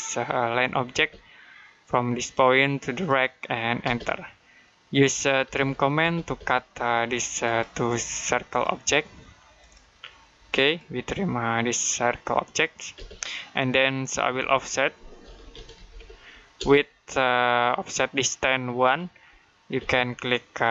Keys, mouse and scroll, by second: 0.8 space, 2.0 click, 3.7 space, 5.1-5.9 typing, 7.3 click, 10.1 click, 12.8 space, 14.3-16.4 typing, 18.7 1, 19.6 space.